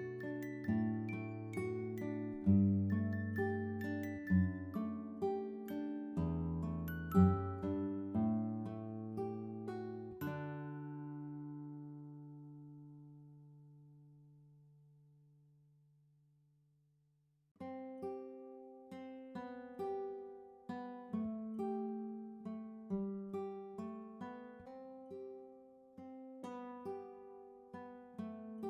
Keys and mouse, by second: 2.4 click, 2.9 click, 6.3 click, 12.4 click, 13.5 click, 15.2 click, 17.0 click, 17.1 click, 18.3 click, 19.2 ctrl+a, 19.2-21.1 typing, 22.1 click, 23.6 click, 24.7 click, 26.5 click, 28.3 double click, 28.5 click, 28.6 double click.